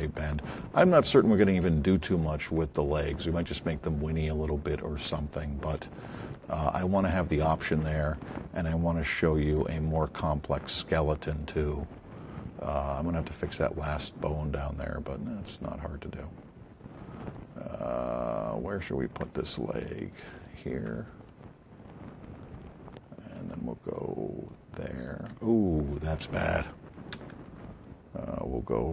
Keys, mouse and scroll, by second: 2.4 alt+click, 5.0 click, 5.4-6.8 alt+drag, 9.0 click, 19.1 alt+click, 20.3 click, 22.7 alt+click, 24.4 click, 25.4 alt+click, 27.1 z.